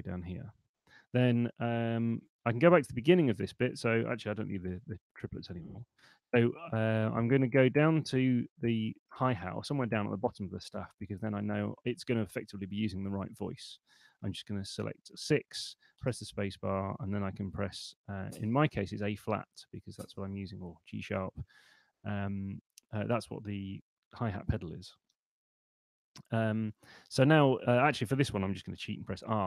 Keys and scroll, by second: 2.5 !, 3.7 Escape, 4.5 shift+i, 4.9 super+Left, 6.3 Down, 7.1 Up, 7.9 Down, 14.5 6, 16.1 space, 19.6 space, 25.2 Escape, 28.7 r.